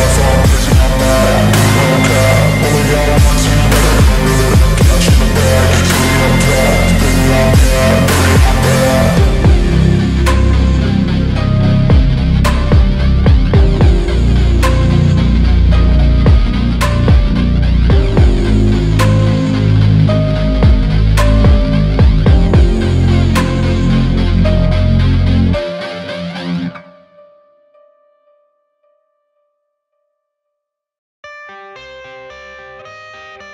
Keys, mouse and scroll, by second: 1.1 alt+middle click, 5.0 alt+click, 5.3 scroll up 1, 5.7 alt+click, 6.0-6.3 alt+scroll up 1, 6.3 alt+middle click, 6.4 scroll down 1, 6.6 alt+click, 7.2-7.7 scroll down 1, 8.0 alt+middle click, 8.5-8.9 scroll up 1, 8.9 scroll down 1, 9.1 alt+click, 9.9 alt+click, 10.8 scroll up 1, 11.1 alt+middle click, 11.7-12.4 scroll down 1, 13.8 double click, 14.1-15.1 typing, 15.9-17.1 scroll up 1, 17.7-18.4 scroll up 1, 20.5-20.9 scroll down 1, 21.2 alt+click, 22.1 scroll down 1, 22.4 alt+middle click, 24.0 alt+middle click, 24.9-25.3 scroll up 1, 25.3 scroll down 1, 25.6-26.0 scroll up 1, 26.1 alt+middle click, 28.8 scroll down 1, 29.0 alt+middle click, 29.4 alt+click, 29.7 scroll down 1, 29.9 alt+middle click, 31.0-32.0 scroll up 1, 32.2 alt+click, 32.9 alt+scroll up 1, 33.1 alt+middle click, 33.1 alt+click.